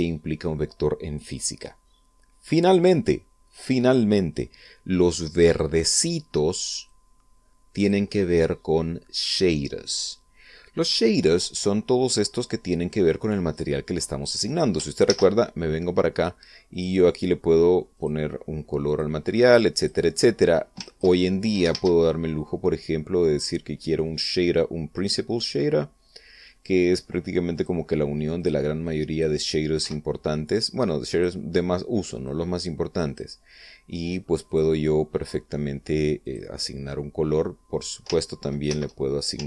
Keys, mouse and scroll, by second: 7.5-8.7 drag, 12.9-14.4 drag, 15.7 shift+z, 17.3 click, 18.6 click, 19.5 click, 20.1-20.7 drag, 21.5 ctrl+click, 22.3 shift+a, 28.2 click, 29.0 click, 29.5-30.0 drag, 30.5 x, 31.2-32.1 drag, 32.9 click, 35.1 click, 36.9 click, 39.3 ctrl+c.